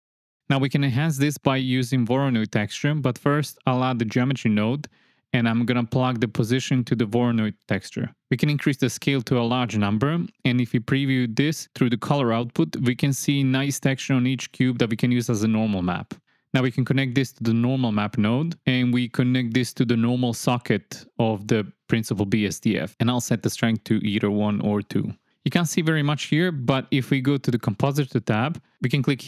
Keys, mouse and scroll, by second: 1.9 click, 2.5 click, 3.0 click, 5.2 shift+a, 6.9 drag, 7.3-7.6 drag, 8.3-9.3 drag, 9.1 KP_0, 10.2 ctrl+shift+click, 12.7 shift+click, 14.1 drag, 14.6 click, 15.4 click, 19.8 click, 20.2 click, 21.0-21.9 drag, 24.4-25.9 drag, 26.4 click.